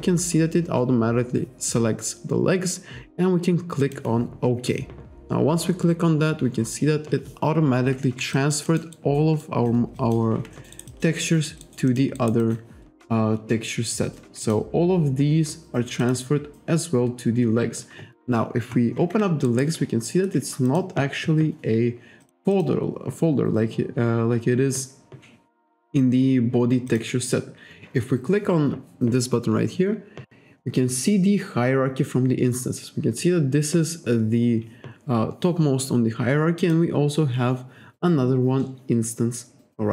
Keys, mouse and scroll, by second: 3.9 click, 8.4 alt+click, 9.5 alt+click, 10.0 alt+click, 10.6 alt+middle click, 10.8 alt+right click, 11.0 alt+click, 11.7 alt+right click, 12.2 alt+right click, 12.5 alt+click, 14.5 click, 16.1 click, 19.5 alt+right click, 20.7 click, 22.3 click, 22.6 click, 27.0 click, 36.6 click.